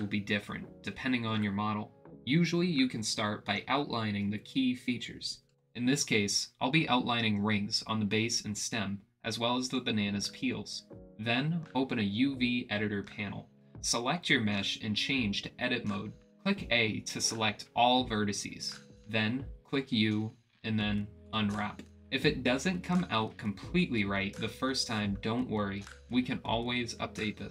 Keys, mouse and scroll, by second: 2.6 middle click, 3.5 middle click, 5.0 ctrl+e, 5.5 middle click, 6.6 middle click, 7.4 middle click, 8.0 middle click, 8.8 middle click, 9.5 middle click, 10.1 ctrl+e, 10.4 click, 10.8 middle click, 11.7-12.9 drag, 17.3 a, 20.8 u, 22.8 click.